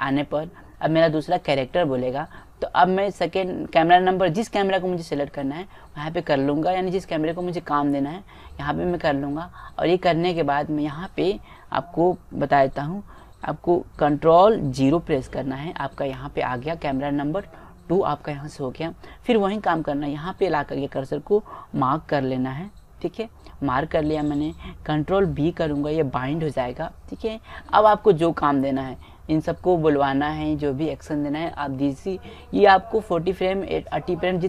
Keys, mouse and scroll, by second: 0.3-2.0 drag, 6.5-8.3 drag, 15.0 ctrl+KP_0, 22.5 m, 26.6 ctrl+b.